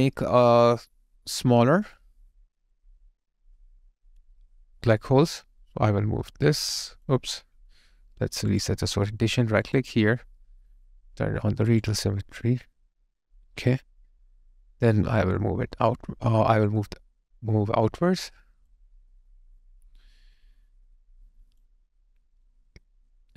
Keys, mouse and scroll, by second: 9.6 right click, 22.3 right click.